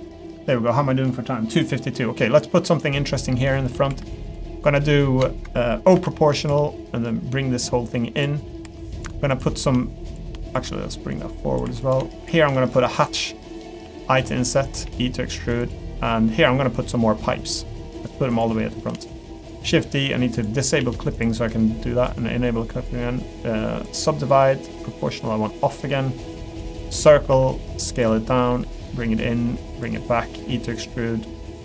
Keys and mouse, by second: 0.4 middle click, 1.5 middle click, 2.3 middle click, 3.0 middle click, 3.5 shift+middle click, 3.9 3, 4.5 middle click, 5.9 o, 6.9-8.2 drag, 8.4 middle click, 8.6 3, 10.9 click, 12.2 shift+click, 13.7 i, 14.8 e, 15.8 middle click, 16.4 middle click, 17.2 middle click, 18.0 middle click, 18.6 middle click, 19.0 shift+d, 20.3 click, 20.8 s, 22.1 click, 23.8-25.1 right drag, 25.1 click, 26.9 click, 27.3 s, 28.1 middle click, 28.5 g, 29.0 middle click, 30.0 middle click.